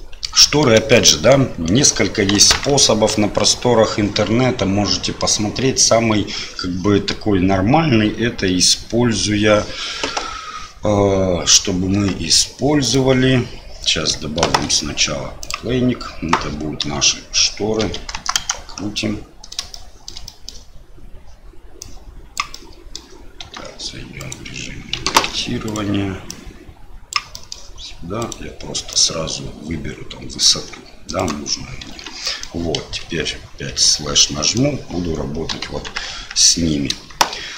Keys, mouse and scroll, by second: 0.9 shift+middle click, 2.3 KP_1, 3.1 KP_3, 10.2 Tab, 11.9 Tab, 12.8 click, 14.4 shift+a, 16.8 r, 18.9 middle click, 19.7 shift+middle click, 20.2 scroll up 1, 21.9 click, 22.5 middle click, 23.4 Tab, 24.2 click, 25.1 ctrl+z, 25.6 click, 26.3-27.3 drag, 27.4 middle click, 28.2 click, 28.9-31.2 drag, 31.9 Tab, 32.2 middle click, 33.1 KP_Divide, 33.6 KP_Divide, 34.1 middle click, 35.6 KP_1, 36.1 KP_3.